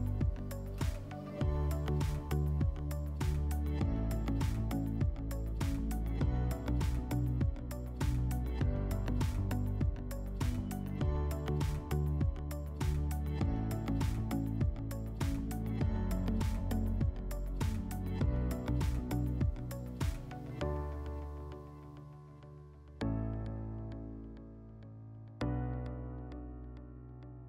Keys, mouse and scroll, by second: 0.5 click, 1.2 scroll, 1.4 w, 1.8-2.8 scroll, 3.6 shift+click, 5.0 click, 5.9 click, 7.1 click, 7.4 click, 7.8 click, 8.4 click, 9.4 middle click, 10.3 middle click, 10.3-10.8 scroll, 10.8 click, 13.8-15.3 drag, 16.3-17.8 drag, 19.7-21.3 drag, 21.5-23.1 drag, 26.1-27.4 drag.